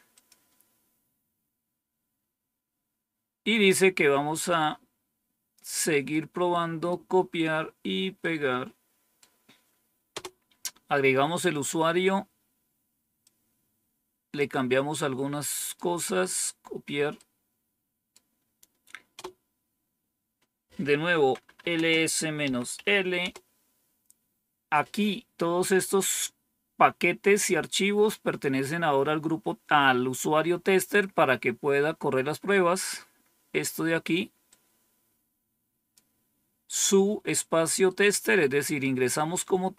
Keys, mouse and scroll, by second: 0.0 click, 0.7-1.5 scroll down 3, 4.3-5.5 drag, 6.0 right click, 8.1 right click, 10.0 Return, 13.2-14.3 drag, 14.9 right click, 17.0-18.0 right drag, 19.0 Return, 21.1-22.6 typing, 23.1 Return, 28.9-29.4 scroll down 3, 31.8-32.6 scroll down 2, 34.4-35.9 drag, 37.8 right click.